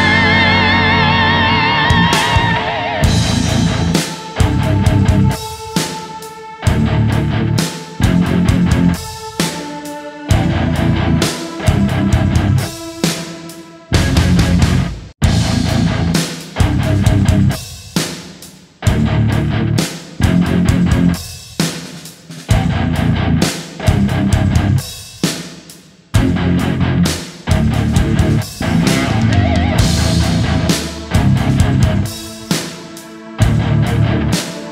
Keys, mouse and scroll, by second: 0.5 right click, 3.0 shift+right click, 4.4 ctrl+shift+d, 4.6 click, 5.1-5.9 typing, 6.7 right click, 10.3 ctrl+shift+d, 15.8 alt+click, 16.1 alt+right click, 18.1 alt+click, 18.6 right click, 19.0 alt+click, 20.7 alt+click, 22.4 alt+click, 24.1 right click, 26.4 alt+right click, 26.5 alt+right click, 26.7 alt+click, 28.1 alt+click, 28.4 alt+click, 30.2 alt+right click, 30.5 alt+right click.